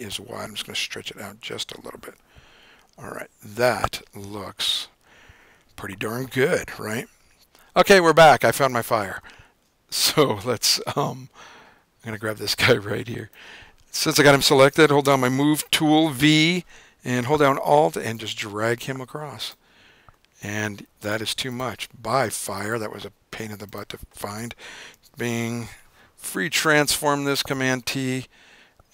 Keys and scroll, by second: 1.8 Down, 3.5 Return, 9.7 l, 15.7 v, 25.2 super+t, 25.6 super+0.